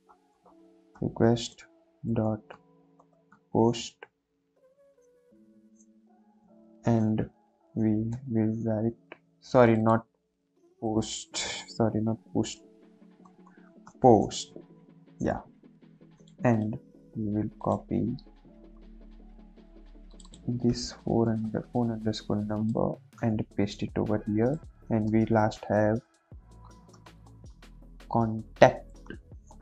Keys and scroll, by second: 0.0-0.5 typing, 2.0-3.5 typing, 6.7 [, 7.0 Left, 7.0 ], 8.0 |, 10.8 BackSpace, 13.2 shift+p, 13.4 shift+o, 13.6 shift+s, 13.8 shift+t, 21.1 ctrl+c, 23.5 ctrl+v, 23.9 ctrl+s, 25.0 Return, 26.8-27.5 typing, 29.0-29.6 typing.